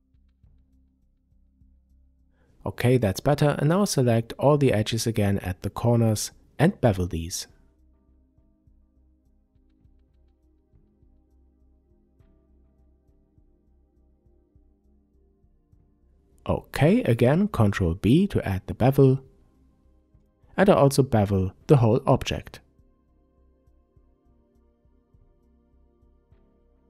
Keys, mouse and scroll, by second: 0.2 click, 1.1 click, 1.7-4.9 middle drag, 2.9-3.5 scroll up 2, 4.0-4.7 scroll up 2, 4.7 scroll up 1, 4.9 click, 5.4-7.3 middle drag, 7.3 shift+click, 7.8-9.9 middle drag, 9.9 shift+click, 11.4 click, 13.1 shift+click, 14.4 ctrl+b, 16.8 click, 17.0-17.4 scroll down 2, 17.4-20.5 middle drag, 18.8 Tab, 20.5 click, 21.4-26.8 middle drag, 24.6 Tab.